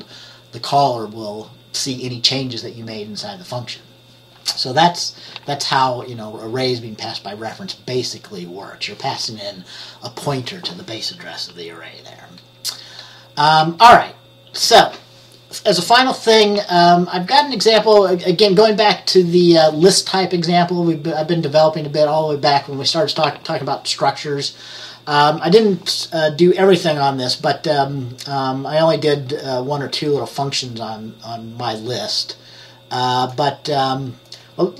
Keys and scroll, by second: 13.7 F10.